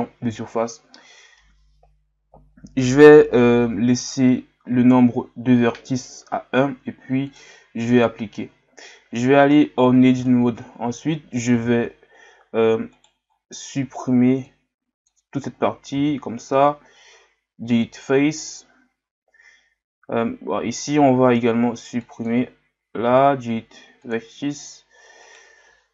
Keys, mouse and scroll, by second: 0.0 click, 7.3-8.9 drag, 8.9 Tab, 9.6-9.9 scroll down 1, 10.2-10.6 scroll down 2, 10.6-11.3 scroll up 1, 11.6 z, 12.9 right click, 25.2 alt+right click.